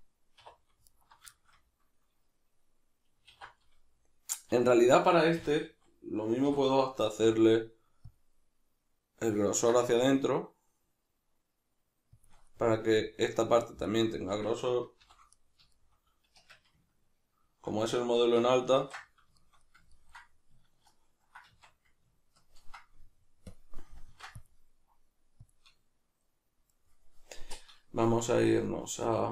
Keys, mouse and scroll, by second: 0.4 2, 0.9 alt+right click, 1.3-3.3 shift+middle drag, 3.3 alt+e, 4.6 Escape, 5.4 a, 6.4 3, 7.1 alt+e, 12.3 shift+click, 12.5 middle click, 14.2 a, 15.0 shift+n, 15.3-23.5 middle drag, 16.3 Tab, 18.8 ctrl+2, 21.5 Tab, 23.5 click, 24.1 ctrl+r, 25.5 click, 26.7-29.3 middle drag, 28.0 Tab.